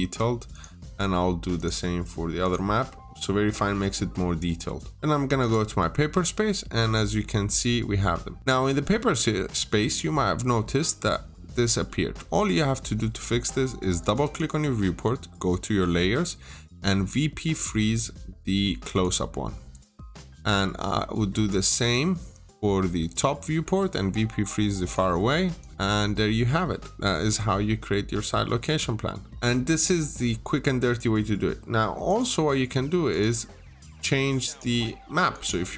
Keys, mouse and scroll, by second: 0.0 Escape, 0.3 click, 0.5 double click, 1.4 click, 5.2 click, 6.1 middle click, 8.4 click, 8.7 scroll down 1, 9.0 middle click, 9.4-9.9 scroll up 1, 10.3 scroll down 1, 10.9 scroll up 1, 11.5-12.2 scroll down 2, 11.7 middle click, 13.8 click, 14.0 double click, 18.7 click, 19.8 double click, 20.8 middle click, 20.9-21.4 scroll down 1, 21.4 click, 21.6 double click, 24.6 click, 25.6 double click, 26.0 scroll up 1, 26.5 middle click, 27.7-28.1 scroll down 1, 28.3-28.6 scroll up 1, 29.1 scroll down 1, 29.3 middle click, 31.9 click.